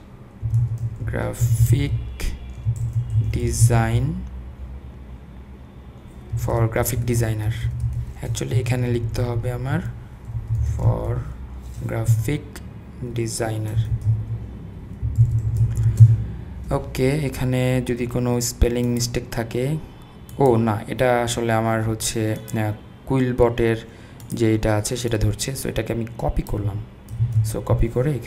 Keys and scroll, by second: 0.2-4.1 typing, 6.3-11.1 typing, 12.1-13.1 Right, 13.5-16.1 typing, 27.2 super+c.